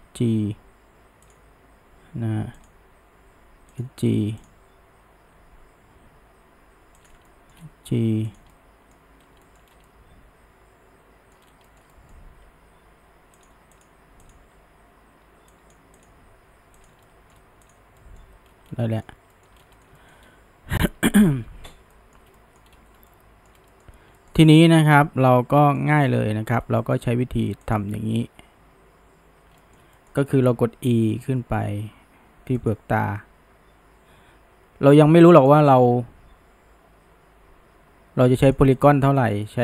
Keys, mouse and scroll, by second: 2.6 click, 2.9 g, 4.5 click, 5.2 g, 7.3-8.3 shift+middle drag, 8.3 click, 8.6-9.2 middle drag, 9.2 scroll up 1, 9.5 shift+middle drag, 9.7 scroll down 1, 9.9-11.4 middle drag, 11.4 scroll up 1, 11.7-12.5 shift+middle drag, 12.5 g, 13.8 click, 14.3 click, 14.6 g, 16.0 click, 16.2 g, 17.1-17.7 shift+middle drag, 17.7 click, 18.0-18.5 middle drag, 18.5 scroll down 1, 18.9-19.6 middle drag, 19.6 scroll down 1, 19.8 shift+middle click, 20.3-21.6 scroll up 2, 21.6 scroll down 1, 21.9-22.7 shift+middle drag, 22.7-23.1 scroll up 1, 23.1-24.4 shift+middle drag, 24.4-24.7 scroll up 2, 24.7-27.7 shift+middle drag, 27.7 click, 29.6-31.0 shift+middle drag, 31.0 e, 33.2 e, 38.8 click, 39.2-39.6 shift+middle drag.